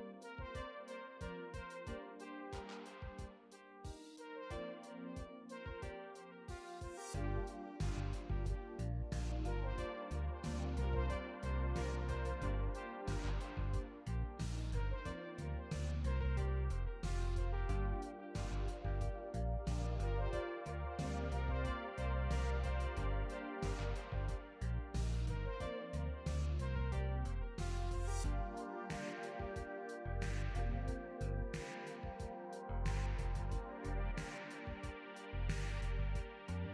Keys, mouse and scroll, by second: 1.4 click, 3.9 click, 5.0 click, 7.8 click, 9.9 click, 11.6 shift+click, 16.0 click, 16.8 right click, 21.2 shift+click, 23.2 click, 29.6 click, 32.8 click, 34.9 click.